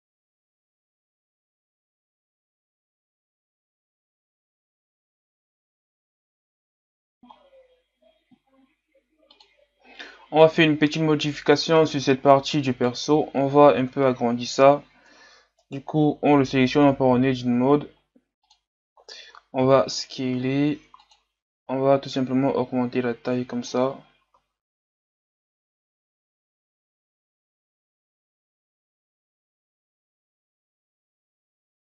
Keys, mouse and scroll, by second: 2.6-3.7 drag, 4.2 click, 4.7 middle click, 4.9 a, 5.2 click, 5.4-6.2 scroll down 4, 6.2 middle click, 6.4 KP_1, 6.6 scroll down 1, 6.8-7.2 scroll up 1, 7.2 Delete, 7.5-8.2 scroll down 2, 9.4-10.8 drag, 10.8-11.8 scroll down 1, 11.9 scroll down 1, 12.2-12.8 scroll up 3, 12.8 right click, 13.1-13.8 scroll up 5, 13.8 Tab, 15.7-16.9 right drag, 16.9 l, 18.5 click, 19.0-19.6 scroll down 2, 19.6 s, 22.2-24.4 drag, 24.4 s, 25.1 scroll up 1, 25.2 click, 25.4 Tab, 25.5 scroll down 1, 25.8 KP_3, 25.9 scroll up 3, 26.0 Tab, 26.4 click, 26.6 alt+right click, 26.9 r, 27.1 click, 27.3 s, 27.4 click, 27.8 KP_1, 27.9 Tab, 27.9 a, 28.2 scroll down 5, 28.2 scroll up 1, 28.4 Tab, 28.5 ctrl+r, 28.8 scroll up 2, 28.8 ctrl+r, 29.2 scroll down 3, 29.4 alt+right click, 29.5 s, 29.9 alt+right click, 30.0 s, 30.3 Tab, 30.3 scroll down 4, 30.5 scroll up 6, 30.7 scroll down 1, 30.8 Tab, 30.9 scroll up 1, 31.0 alt+right click, 31.1 s, 31.5 alt+right click, 31.7 click.